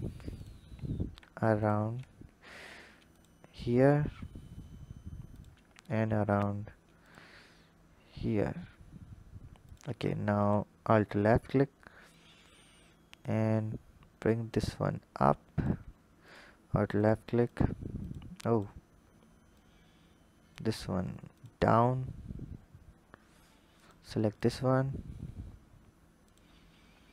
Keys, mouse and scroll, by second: 0.1 click, 1.4 click, 2.2 ctrl+r, 5.9 ctrl+r, 10.2 alt+click, 12.0 click, 14.1 click, 16.0 alt+click, 16.8 alt+click, 17.3 alt+click, 17.8 alt+click, 18.3 alt+click, 19.4 click, 21.1 alt+click, 21.9-23.2 scroll up 3, 23.5 alt+click, 24.2 alt+click, 26.0 alt+click.